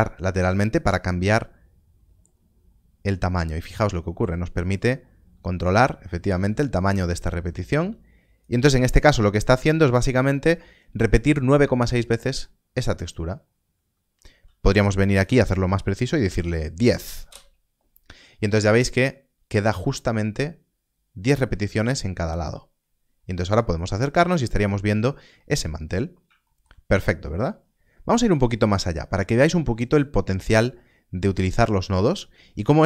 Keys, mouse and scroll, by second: 12.0 click, 12.2 middle click, 13.0-14.6 scroll down 1, 14.6 click, 16.1 Left, 17.2 Return, 22.3 Return, 22.4 scroll up 1, 23.5 middle click, 24.0-24.5 scroll up 1, 24.5 middle click, 26.0 scroll down 1, 26.4 shift+middle click, 27.1 scroll down 1, 28.3 middle click, 29.0 click.